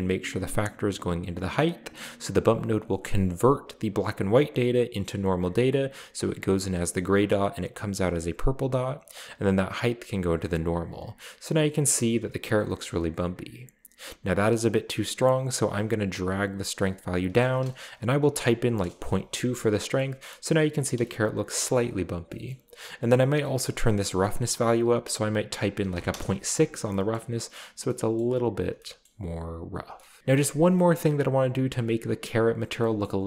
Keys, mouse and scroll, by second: 1.7 click, 9.1-10.5 drag, 12.0 scroll up 2, 15.7-17.2 drag, 17.3 click, 18.5 typing, 18.9 Return, 20.3-21.0 middle drag, 21.7 shift+middle click, 22.5-23.3 shift+middle drag, 23.4 middle click, 24.1 click, 25.0 click, 25.9 typing, 26.1 Return, 26.9 shift+middle click, 28.2-29.6 middle drag, 30.0 shift+middle click, 30.7-31.4 shift+middle drag, 31.5 middle drag, 33.0-33.2 middle drag.